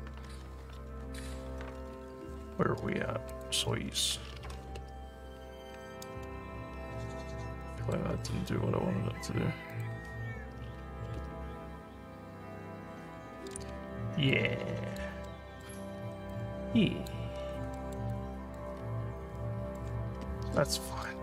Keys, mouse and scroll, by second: 0.3 scroll down 1, 3.3 click, 6.8 alt+middle click, 7.2 alt+middle click, 7.6 alt+middle click, 9.8 click, 13.9 alt+scroll up 1, 14.3 alt+click, 15.3 alt+middle click, 16.0 alt+scroll up 1, 16.3 alt+click, 17.4 alt+scroll down 2, 17.8 alt+middle click, 18.1 alt+click, 18.8 alt+scroll down 1, 19.4 alt+middle click.